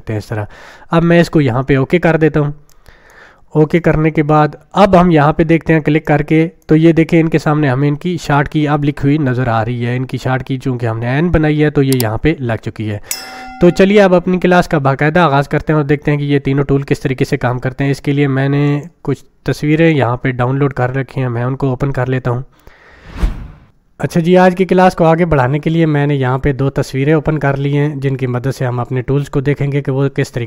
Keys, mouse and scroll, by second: 2.7-3.3 click, 6.1-6.6 drag, 18.7 click.